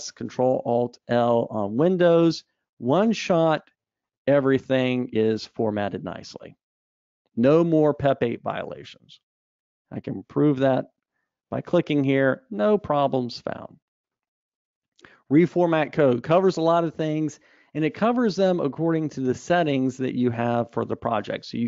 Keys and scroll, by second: 3.8 alt+super+l.